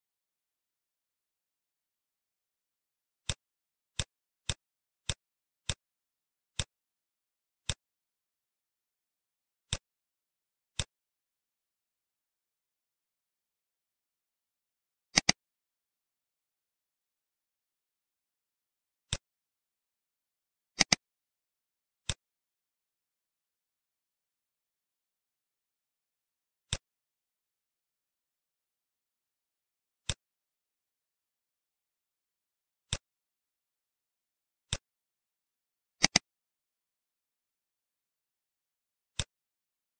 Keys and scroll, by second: 17.7 ctrl+v, 37.3 ctrl+v.